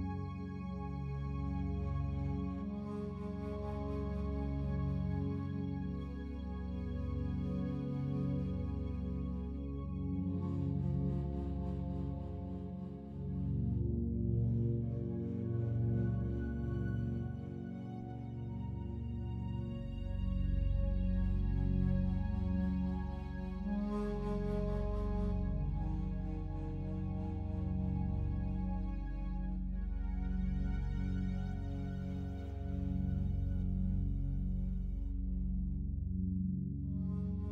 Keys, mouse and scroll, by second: 0.0 /, 1.5 click, 1.9 click, 3.1 click, 4.3 Tab, 5.2 a, 7.0 alt+shift+click, 8.0 /, 9.0-10.4 alt+drag, 10.5 click, 11.4 alt+shift+click, 11.8-13.8 alt+shift+drag, 13.9-16.3 ctrl+drag, 16.6 ctrl+click, 17.3-18.4 alt+drag, 19.0 shift+click, 19.6 alt+shift+click, 20.5 ctrl+click, 21.1-23.5 alt+drag, 23.8-24.9 alt+shift+drag, 24.9 alt+shift+click, 25.7 alt+click, 26.6 ctrl+alt+click, 27.4-28.6 ctrl+drag, 28.9 alt+shift+click, 29.5 ctrl+alt+click, 30.5 ctrl+click, 30.9 ctrl+click, 32.1-33.2 alt+drag, 33.3-35.4 ctrl+drag, 35.7 alt+shift+click, 36.5 ctrl+click.